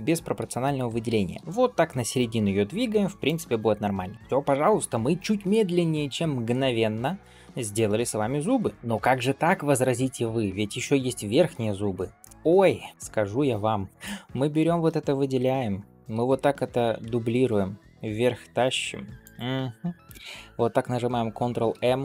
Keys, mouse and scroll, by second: 0.9 g, 3.6 Tab, 4.1 click, 4.1 middle click, 4.1 scroll up 2, 7.1-7.4 scroll down 2, 7.4 shift+middle click, 7.8-8.5 scroll up 1, 8.5 scroll up 1, 8.7 ctrl+s, 12.1 shift+middle click, 12.9 ctrl+s, 12.9 shift+middle click, 13.3-14.1 drag, 14.4 shift+middle click, 16.1 shift+d, 21.6 ctrl+m.